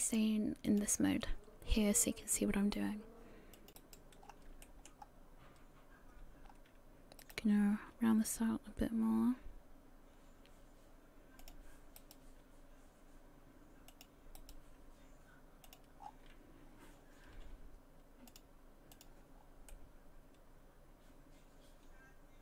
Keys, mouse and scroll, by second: 0.1 click, 3.6 click, 3.8 right click, 4.2 scroll up 3, 4.6 shift+middle click, 5.0-6.5 scroll up 1, 6.5 scroll up 2, 7.2 right click, 8.3 g, 12.0 right click, 12.2 g, 14.4 right click, 14.6 g, 16.0 scroll down 6, 18.3 click, 19.4-19.8 scroll down 2, 19.7 middle click, 21.0 middle click.